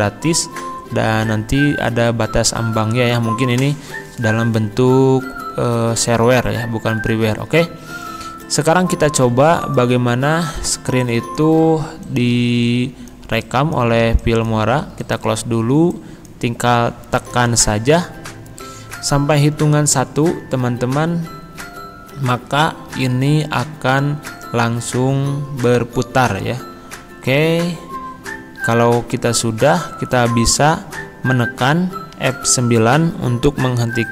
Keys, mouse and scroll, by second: 1.2 click, 8.4 click.